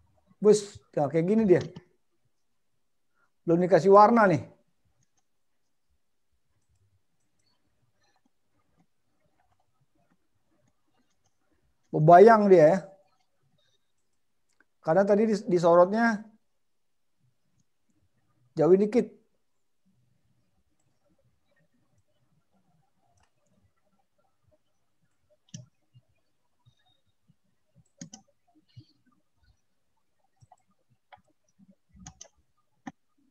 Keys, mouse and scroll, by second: 16.6 middle click, 22.4 click, 23.6 middle click.